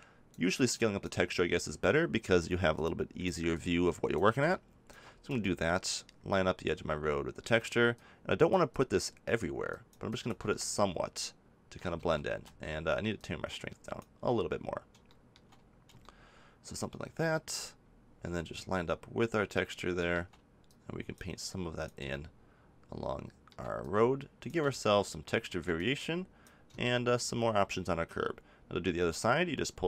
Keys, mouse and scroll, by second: 0.4-2.6 drag, 2.7-5.4 drag, 5.4-7.9 middle drag, 7.9-12.0 drag, 12.0 ctrl+z, 12.4 ctrl+z, 15.1-18.1 middle drag, 20.6-23.2 drag, 23.2 middle click, 23.8-25.6 drag, 25.6-28.8 middle drag.